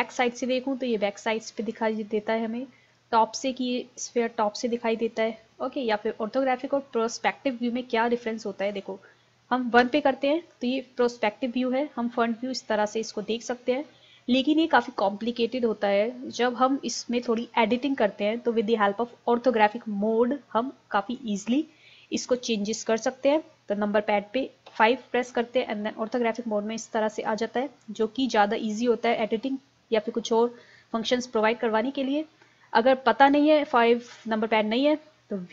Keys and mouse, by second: 0.0 click, 3.0 click, 5.6 middle click, 9.8 KP_1, 13.4-17.0 middle drag, 24.7 KP_5.